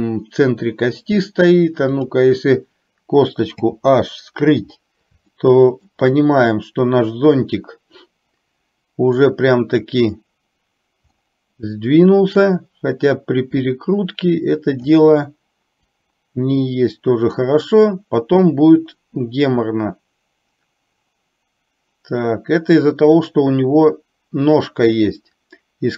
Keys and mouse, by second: 3.6 h, 5.3-5.8 shift+middle drag, 9.2-10.0 drag, 12.6 click, 12.8-15.0 drag, 16.0 click, 16.6 click, 18.8-25.9 drag.